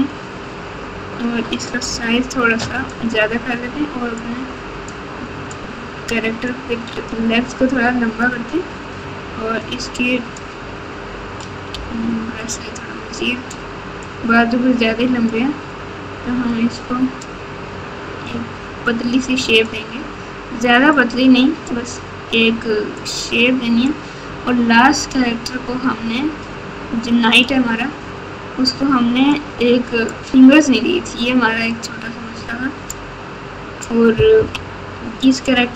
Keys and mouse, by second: 1.8 f, 4.1 click, 5.5 click, 6.4 click, 7.8 click, 9.6 click, 11.7 f, 14.0-15.3 drag, 16.5 click, 18.2-19.6 drag, 21.1 click, 22.9 click, 26.4-27.4 drag, 29.3 click, 31.7-32.9 drag, 34.3 KP_3.